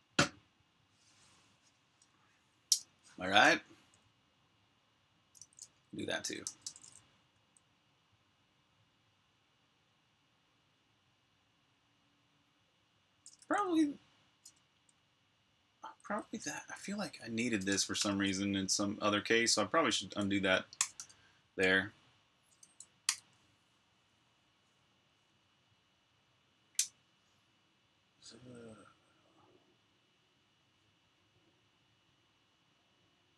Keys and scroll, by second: 3.5 j, 5.2-7.1 typing, 13.2 typing, 15.4-18.1 typing, 20.3-21.3 typing, 22.9 super+b, 23.0-24.4 typing.